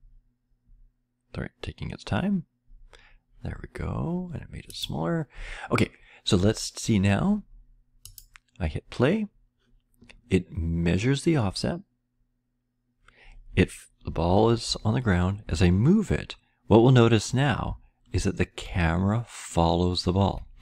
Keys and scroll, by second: 15.1-15.4 Left, 15.4-17.3 Right, 17.7 Left, 17.7 Right, 18.1-18.6 Left, 19.2 Left, 19.2-20.4 Down.